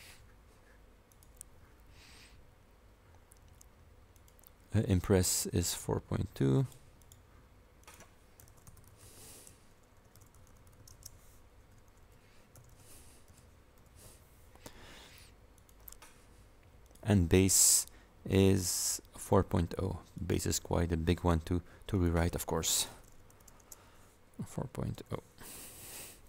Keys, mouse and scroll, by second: 1.2 click, 4.2 click, 6.6 click, 7.1 click, 7.9 click, 8.3-13.8 typing, 11.8 KP_Multiply, 15.6 click, 16.9 click, 20.2 click, 22.0 click, 22.8-25.6 typing.